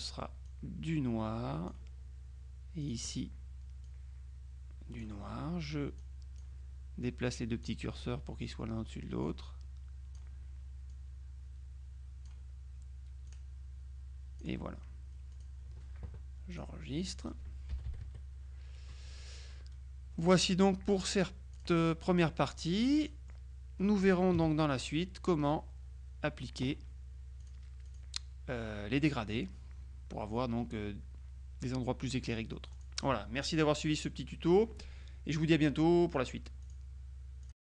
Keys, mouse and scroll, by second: 0.5-2.3 drag, 2.9 click, 3.9-5.6 drag, 6.1 click, 7.1 click, 9.3-10.7 drag, 10.9-12.8 drag, 13.3-15.0 drag, 15.4 click, 16.6 click, 17.2 click, 17.8 KP_Subtract, 20.3 click, 21.6 click, 22.1-23.9 middle drag, 24.4 KP_Subtract, 25.5 middle click, 27.5-28.5 drag, 28.7 click, 32.8 click, 36.7 click, 37.5 click.